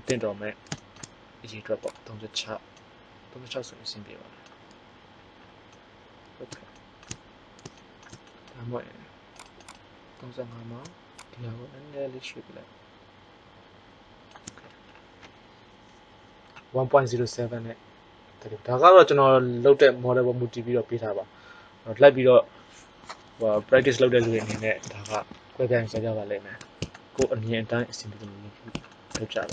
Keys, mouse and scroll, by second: 1.9 click, 9.2-12.3 drag, 26.5-27.0 scroll down 1.